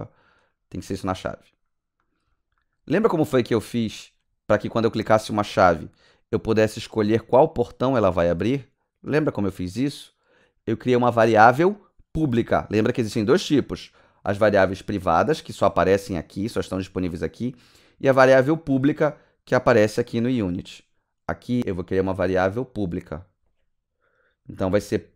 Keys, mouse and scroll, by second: 0.4 click, 0.7 click, 1.2 alt+middle click, 1.4 alt+scroll down 1, 1.9 alt+right click, 2.2 alt+middle click, 2.5 right click, 2.9 alt+click, 3.2 alt+middle click, 3.5 alt+right click, 3.8 alt+middle click, 4.4 click, 14.9 click, 19.0 click, 22.6 click, 25.0-25.1 typing.